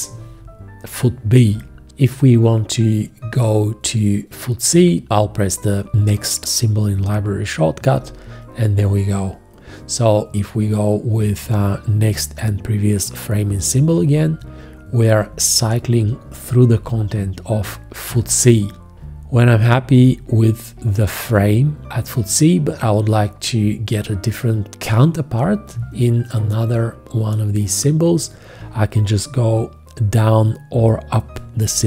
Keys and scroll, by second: 7.9 ', 13.9 shift+,, 15.8 shift+., 18.1 shift+., 18.9 shift+,.